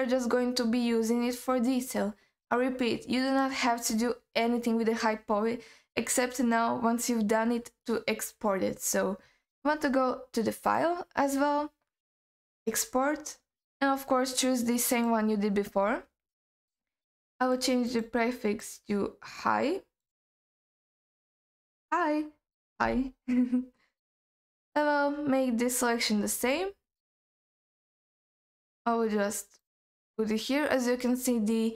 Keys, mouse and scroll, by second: 10.7-15.2 drag.